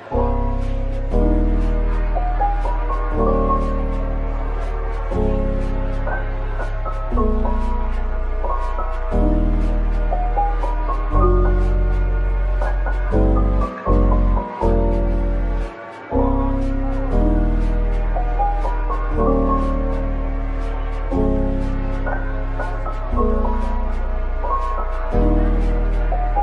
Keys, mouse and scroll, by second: 0.6 Tab, 1.0 middle click, 1.2 shift+right click, 2.5 shift+a, 3.4 shift+click, 3.8 shift+right click, 4.3 typing, 6.6 typing, 8.3 middle click, 9.4-9.8 typing, 11.1-12.1 typing, 13.0 middle click, 13.2-14.1 typing, 17.3 typing, 18.1 middle click, 18.5-19.5 scroll down 1, 19.5 Tab, 21.6 typing, 22.7 Tab, 23.3 typing, 25.9-26.4 scroll up 1, 26.3-26.4 typing.